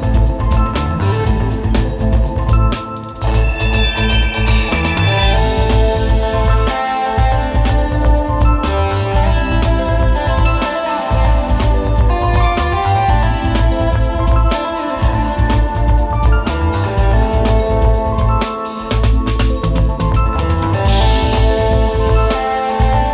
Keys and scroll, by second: 1.4 space, 1.6 space, 5.7 space, 7.1 super+z, 7.7 space, 10.1 super+[, 10.6 super+[, 11.6 space, 11.9 super+z, 12.0 space, 13.6 space, 14.5 space, 16.3 space, 16.7 space.